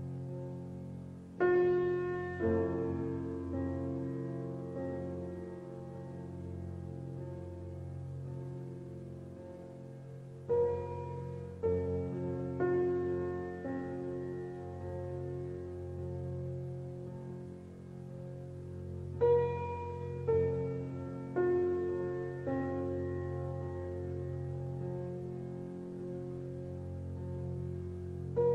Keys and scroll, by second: 22.0 Return, 22.4 KP_2, 22.9 Return, 23.4 KP_3, 25.5 KP_5.